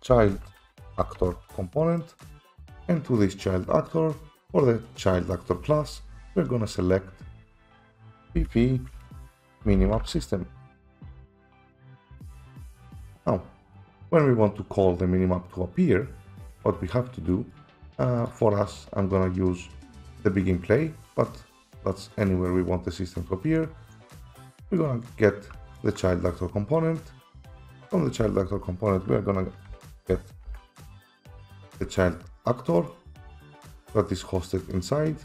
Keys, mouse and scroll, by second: 0.1-1.2 typing, 2.6 click, 3.6 click, 6.9 click, 8.0 typing, 8.1 click, 9.5-10.1 typing, 10.0 click, 10.4 click, 12.2 click, 12.5 click, 13.9 scroll, 16.5-17.4 scroll, 17.5 right click, 18.9 click, 20.1 click, 25.8 ctrl+click, 26.5-27.0 scroll, 27.9 click, 29.7 scroll up 5, 29.7-31.0 typing, 29.8 scroll, 32.9 click, 34.6 click.